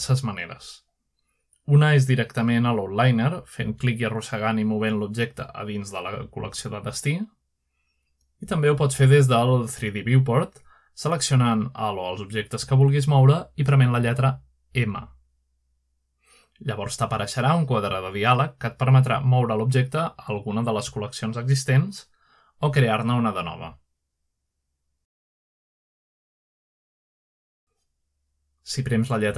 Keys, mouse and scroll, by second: 0.0 click, 0.5 click, 0.7-2.3 drag, 4.0-4.8 drag, 8.3-10.2 drag, 12.3 click, 14.2 click, 15.1 g, 15.7 click, 16.8 click, 18.0 click, 19.7 typing, 24.2 click, 26.8 click, 27.5 drag.